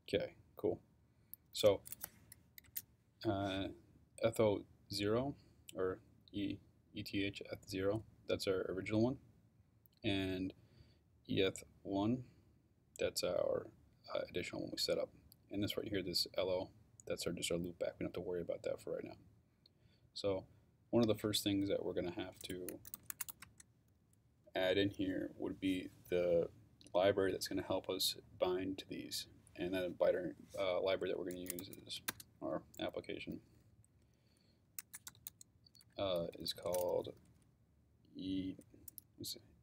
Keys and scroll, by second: 22.5-23.8 typing, 31.1-32.3 typing, 34.6-37.2 typing.